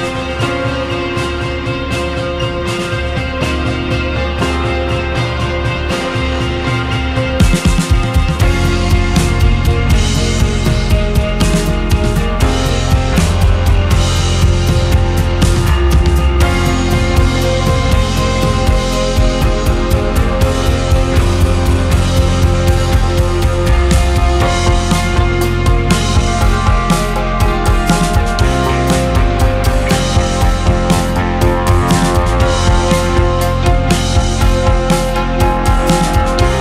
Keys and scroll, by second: 0.1 space, 4.5 space, 7.0 space, 12.6 2, 13.4 space, 15.7 2, 19.7 KP_6, 20.2 space, 25.8 space, 27.7 space, 31.5 space.